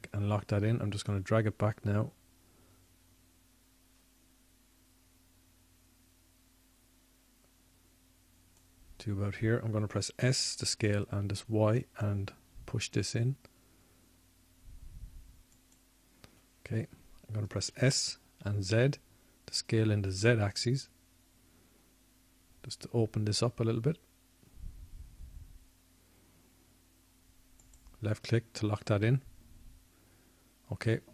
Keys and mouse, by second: 3.1-4.6 drag, 4.8-6.8 drag, 14.0 s, 20.6 click, 21.3 s.